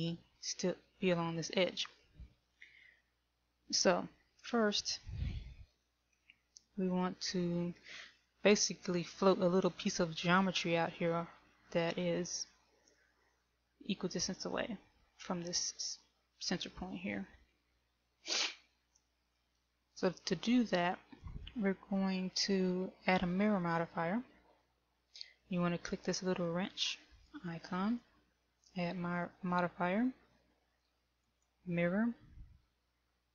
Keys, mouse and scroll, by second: 6.9 shift+middle click, 27.0 click, 28.0 click.